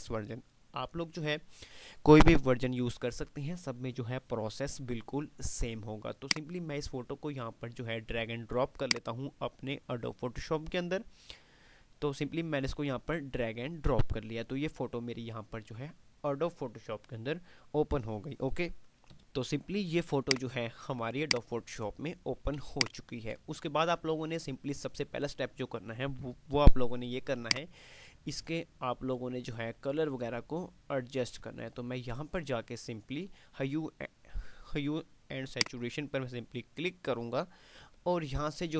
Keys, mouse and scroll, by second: 6.4 click, 8.8-13.2 drag, 19.4 click, 22.7 space, 23.0 click, 23.4 space.